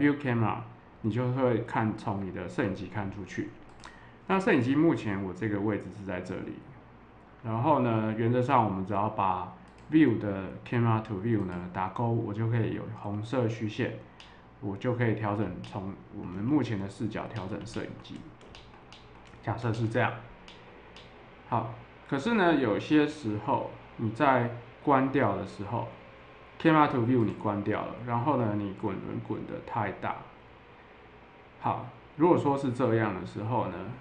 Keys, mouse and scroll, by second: 3.6 click, 9.6 click, 11.4 click, 14.2-15.3 middle drag, 15.6 shift+middle click, 16.4 middle click, 17.3 ctrl+middle click, 18.5 ctrl+middle click, 18.9 middle click, 19.7 ctrl+middle click, 20.4 middle click, 20.9 middle click, 27.2 click, 29.5-32.8 middle drag.